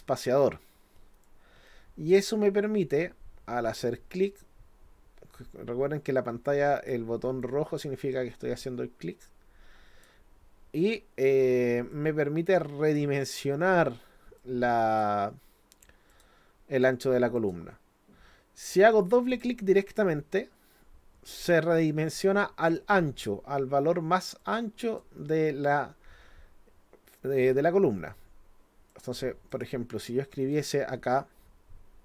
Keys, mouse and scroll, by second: 1.2-6.9 drag, 7.4-10.0 drag, 11.9-13.0 drag, 14.4 click, 16.1 click, 17.4 click, 19.1 click, 19.3 click, 24.4 click, 28.9 click, 29.5 click.